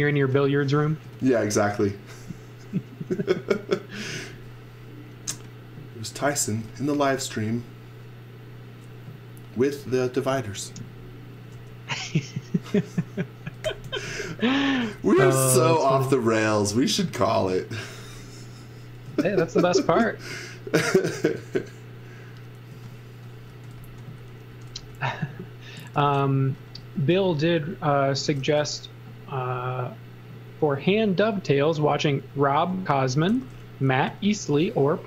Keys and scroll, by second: 0.1 x, 1.2 v, 4.2 z, 5.2-7.5 typing, 8.5 b, 11.5 space, 12.5-16.8 typing, 19.1 z, 19.6 x, 20.8 space, 22.7-24.8 typing, 26.0 n, 27.9-28.9 typing, 30.7 space, 33.3 n.